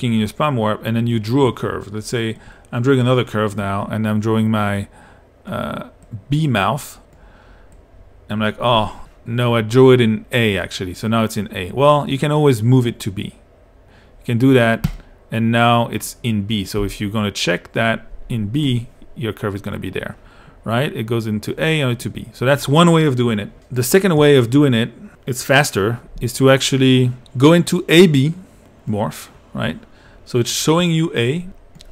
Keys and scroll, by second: 16.8 i.